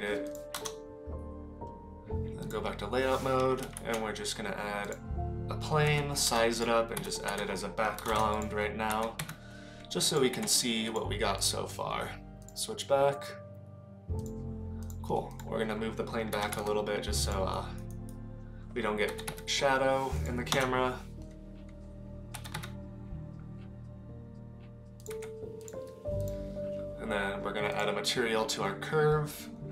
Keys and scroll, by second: 2.5 KP_0, 3.8 shift+a, 5.9 s, 7.0 r, 8.9 g, 10.3 s, 16.3 g, 19.1 g, 20.5 KP_0, 22.3 g, 25.1 s.